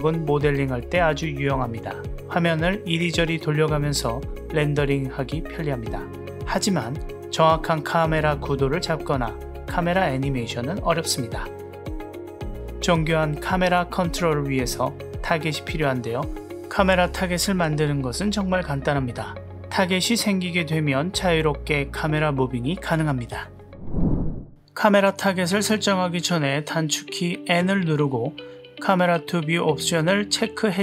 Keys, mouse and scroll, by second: 0.1-1.0 middle drag, 4.8 middle drag, 5.3-6.9 middle drag, 7.2-7.8 middle drag, 8.6-9.8 middle drag, 9.8-10.1 drag, 10.6-11.6 middle drag, 13.0 click, 13.7-17.0 drag, 17.9 click, 18.9 click, 20.6 g, 25.7-28.1 middle drag, 28.5 n.